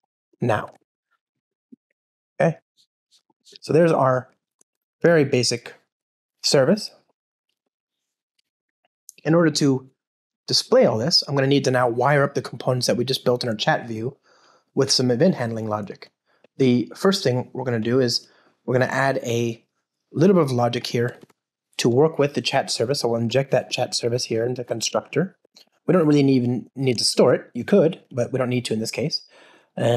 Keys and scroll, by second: 0.7 alt+super+l, 1.5 alt+shift+Left, 3.2 alt+shift+Left, 4.6 alt+shift+Left, 25.4 Return, 26.9 Return.